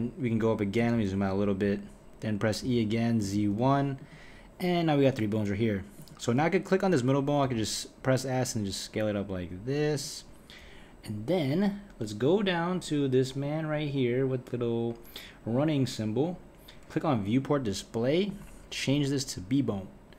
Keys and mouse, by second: 2.6 e, 6.0 click, 7.4 s, 13.4 click, 17.2-20.1 drag.